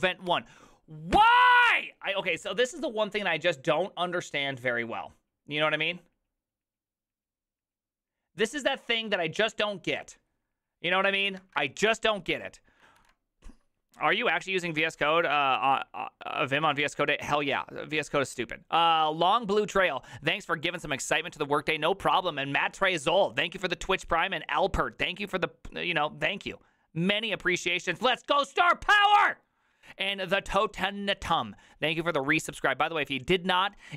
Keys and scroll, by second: 0.3 ctrl+c, 13.0 alt++, 13.0 alt+f.